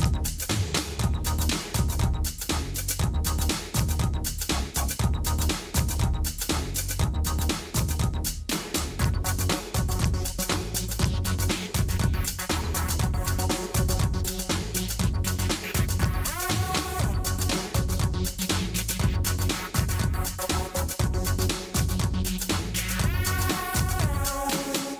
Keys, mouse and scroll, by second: 0.1 click, 0.1 s, 2.9 click, 2.9 s, 4.6 click, 5.5 Tab, 6.1 h, 7.5 Tab, 8.4 s, 11.1 s, 13.0 s, 14.4 Tab, 15.3 Tab, 16.1 alt+h, 17.0 Tab, 17.4 alt+h, 18.8 click, 19.1 Tab, 19.3 middle click, 20.1 middle click, 20.2 a, 20.6 click, 21.1-21.9 middle drag, 22.2 click, 23.7 g.